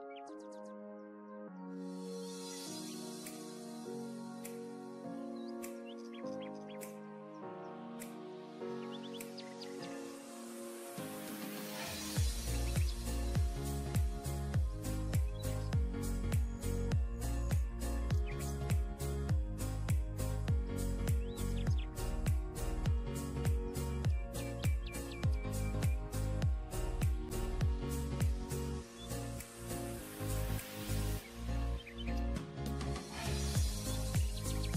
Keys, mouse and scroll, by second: 0.0 double click, 0.7 typing, 5.2 double click, 6.2-7.5 scroll down 1, 20.3-21.6 scroll down 1, 24.5 double click, 31.1 scroll down 1.